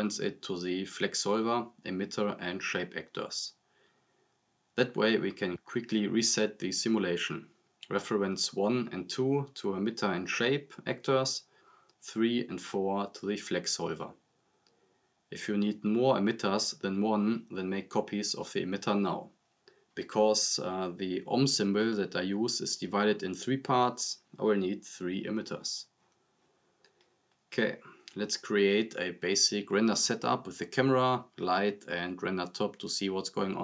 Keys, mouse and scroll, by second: 2.6 space, 6.5-7.1 drag, 8.9-9.4 drag, 15.4 click, 17.3 scroll down 1, 17.6-18.9 drag, 20.4 ctrl+c, 20.6 ctrl+v, 21.7-22.1 drag, 25.9 scroll up 1, 27.7-28.5 scroll down 2, 27.9 click, 28.5 click, 28.9 click, 29.5-31.7 typing, 30.3 click, 31.4 click.